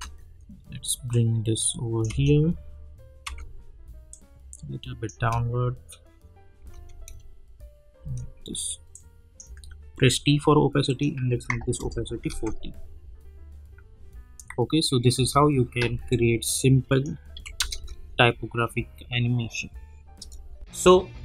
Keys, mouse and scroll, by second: 1.1 click, 2.1 space, 4.1 click, 5.1 space, 8.9 click, 9.9 t, 10.9 click, 11.7 Return, 12.3 space, 15.1 space, 16.1 click, 17.3 n, 17.5 space, 20.2 space.